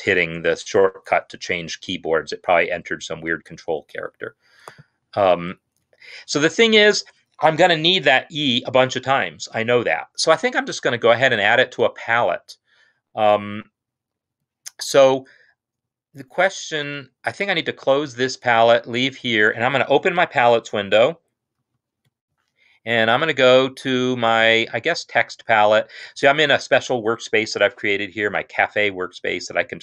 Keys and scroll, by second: 19.1 Escape, 21.7 F9.